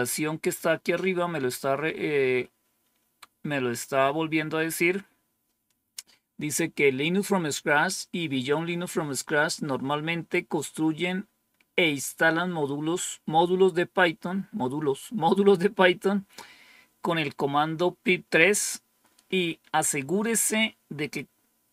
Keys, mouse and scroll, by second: 0.8-1.9 scroll up 1, 1.9-2.6 scroll down 2, 2.6-3.5 scroll down 1.